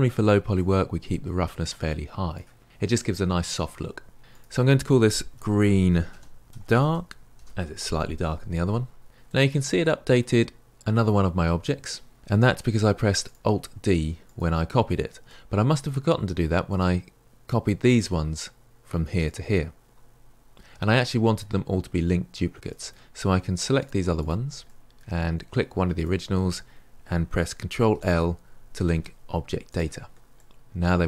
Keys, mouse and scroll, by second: 0.6-7.3 drag, 9.2-13.2 middle drag, 13.2 click, 14.3 click, 15.2-16.7 middle drag, 16.7 click, 17.9 click, 19.2 click, 21.0-22.6 middle drag, 23.6 shift+click, 23.8 shift+click, 24.0 middle click, 24.5 shift+click, 24.7-25.9 middle drag, 25.9 shift+click, 29.7 ctrl+l, 30.3-31.0 middle drag.